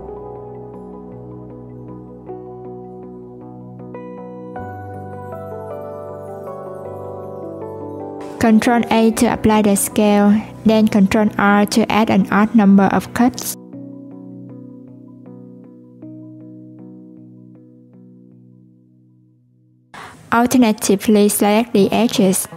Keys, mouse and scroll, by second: 1.3 click, 6.7 s, 8.5 ctrl+a, 9.9 Tab, 11.0 ctrl+r, 18.7 /, 19.0 middle click, 19.9 click, 20.9 shift+click, 21.6 shift+click, 22.3 shift+click.